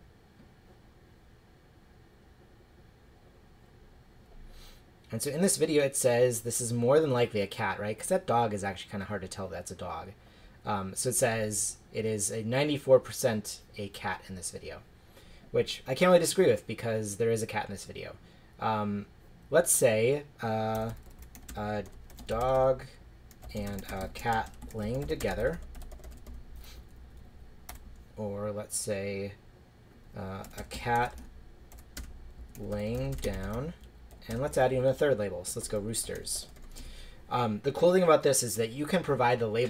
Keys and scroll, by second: 20.7-27.7 typing, 27.3 Left, 30.2-33.8 typing.